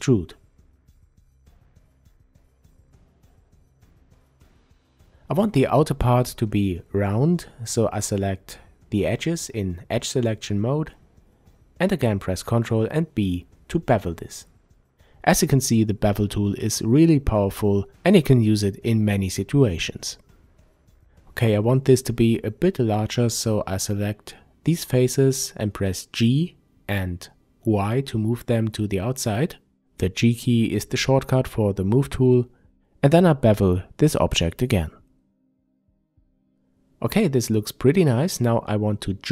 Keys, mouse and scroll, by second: 1.3 click, 3.6 click, 5.0 click, 6.3 shift+click, 7.7 ctrl+b, 14.4 click, 18.6 shift+click, 19.8 shift+click, 21.5 shift+click, 23.1 g, 26.3 click, 27.1 Tab, 27.8-28.5 scroll down 1, 28.5-32.5 middle drag, 31.2 n, 32.5 click, 34.3-39.3 drag, 37.6 Return.